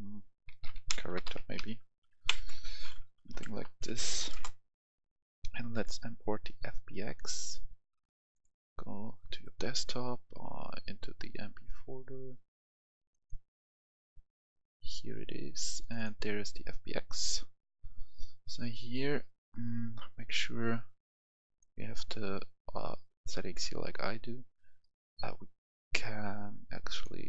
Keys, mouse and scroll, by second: 0.4-1.5 typing, 2.1 Down, 2.3 Left, 2.4 Left, 2.6 Left, 2.7 Left, 3.4 BackSpace, 4.1 h, 4.2 Return, 4.9 click, 10.6-11.5 scroll down 1, 11.5 scroll up 1, 12.9-19.0 drag.